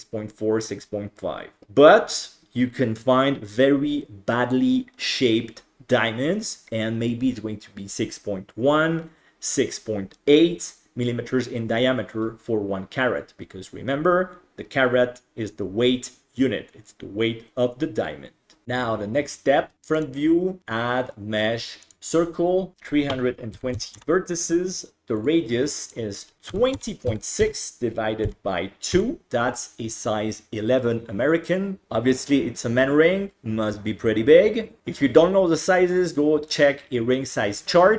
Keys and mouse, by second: 20.1-22.0 drag, 22.7-25.3 drag, 25.9-37.9 drag.